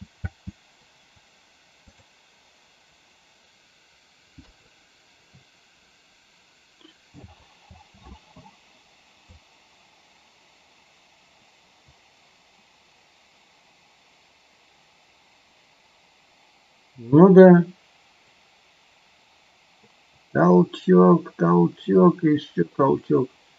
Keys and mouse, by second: 0.3 space, 1.8 click, 4.4 KP_3, 7.6 space, 9.3-23.5 drag.